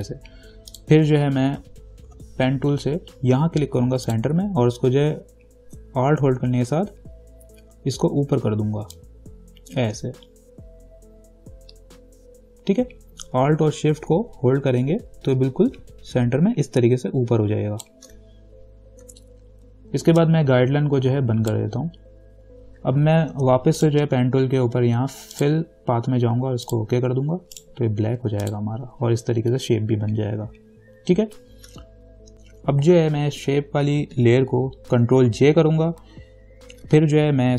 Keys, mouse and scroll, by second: 2.3 p, 4.3 click, 9.1-19.1 ctrl+drag, 19.3 v, 20.4-23.5 drag, 23.5 p, 24.0 right click, 25.5 click, 27.8 right click, 28.6 click, 35.5 ctrl+j, 36.9 v.